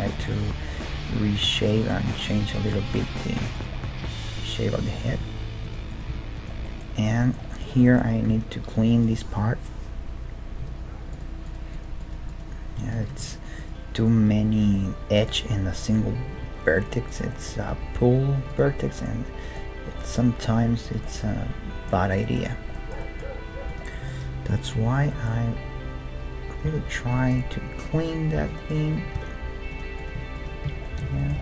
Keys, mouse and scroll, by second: 2.9 ctrl+Tab, 3.6-7.7 right drag, 4.0 g, 5.1 g, 6.1 g, 6.6-9.9 middle drag, 8.3 ctrl+Tab, 9.0 click, 9.7-10.9 right drag, 11.1-15.8 right drag, 13.0 ctrl+z, 14.7 click, 15.3-16.9 middle drag, 16.4 ctrl+Tab, 17.1-19.1 right drag, 17.7 g, 20.6 g, 23.5 g, 26.6 k, 29.1 ctrl+Tab, 30.0-31.4 right drag, 30.7 f, 30.9-31.4 middle drag, 31.1 a.